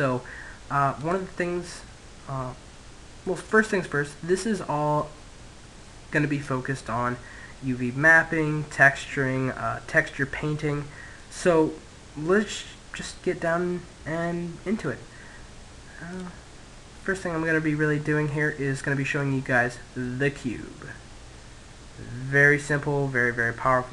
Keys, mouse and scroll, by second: 0.9-2.7 right drag, 2.7 middle click, 4.0-9.7 middle drag, 14.6-16.0 middle drag, 16.0 click, 18.4-21.7 middle drag, 23.5-23.9 middle drag.